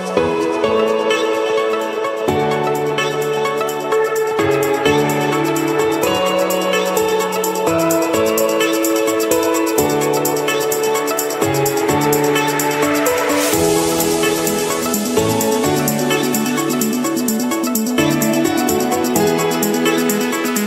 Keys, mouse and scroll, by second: 0.0-0.7 scroll, 1.3 click, 2.0 click, 3.0 click, 3.4 click, 3.9 click, 4.4 scroll down 5, 4.9 scroll down 5, 5.4-6.0 scroll up 5, 7.5 click, 10.3 click, 10.8 click, 11.2-11.9 scroll, 12.5-13.2 scroll, 13.9 click, 15.2 click, 16.7-17.4 scroll down 4, 18.3-19.4 scroll up 2, 19.9-20.6 scroll up 1.